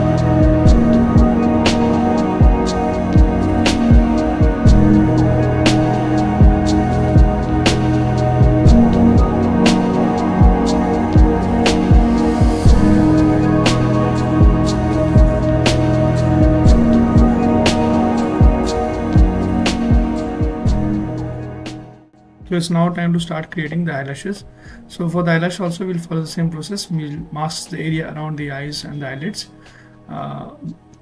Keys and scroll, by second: 6.5 s, 28.5 x.